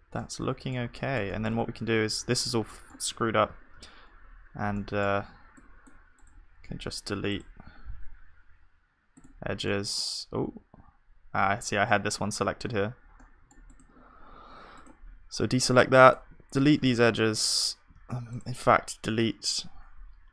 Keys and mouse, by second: 2.6-6.8 middle drag, 3.5 z, 5.2 b, 6.8-9.3 right drag, 9.7-12.7 middle drag, 10.5 ctrl+z, 12.7 c, 16.1 right click, 16.8-20.3 middle drag, 16.9 z, 18.0 ctrl+z.